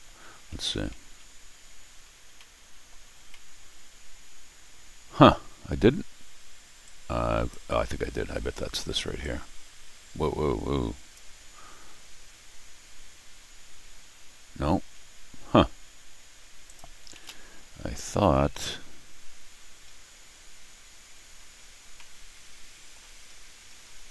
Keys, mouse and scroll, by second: 1.0 Tab, 1.8 middle click, 2.4 middle click, 3.3-5.1 middle drag, 6.8 click, 9.2-11.1 drag, 16.6 click, 17.1 ctrl+alt+r, 19.9-20.3 scroll down 2, 21.1-21.4 scroll up 2, 21.9 middle click, 23.2 scroll up 2.